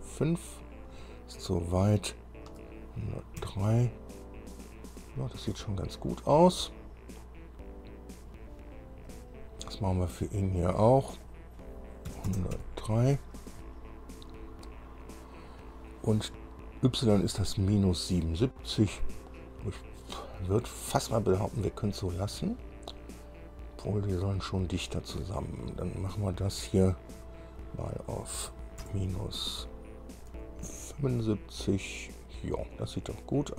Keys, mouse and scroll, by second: 0.1 KP_5, 2.7 BackSpace, 3.6 KP_3, 9.3 click, 11.5 click, 12.3 KP_1, 12.8 KP_0, 12.8 KP_3, 27.3 click, 29.0 KP_Subtract, 30.5 KP_7, 30.8 KP_5.